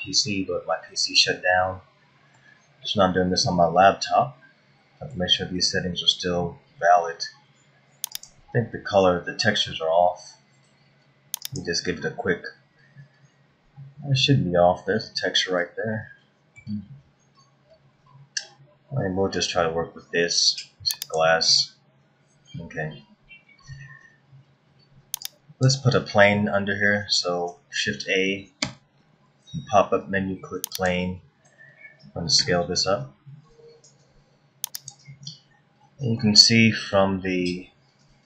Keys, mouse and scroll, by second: 1.0 scroll down 1, 1.6 middle click, 3.4 middle click, 5.5 scroll up 1, 6.2 scroll down 1, 8.1 click, 11.4 click, 15.3 scroll up 1, 15.9 middle click, 21.0 click, 25.5 click, 26.0-27.3 scroll down 2, 28.5 shift+a, 33.2 s, 36.2 middle click, 37.5 scroll up 1.